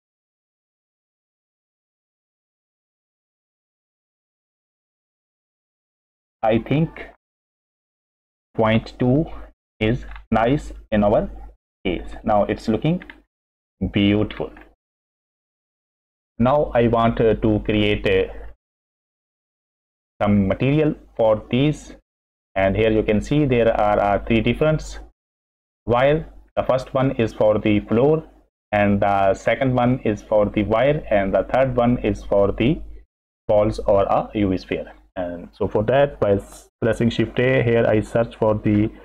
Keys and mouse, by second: 6.5-9.5 middle drag, 9.5 click, 10.2 middle click, 10.7-11.7 middle drag, 12.2 middle click, 13.1 middle click, 13.5-15.0 middle drag, 16.6-17.3 middle drag, 19.0 middle click, 19.8 middle click, 20.5 middle click, 21.2 drag, 21.3-21.7 middle drag, 22.3 middle click, 24.4 middle drag, 26.4 middle click, 27.0 middle click, 28.8 middle click, 34.4 middle click, 35.4 click, 37.2 shift+a.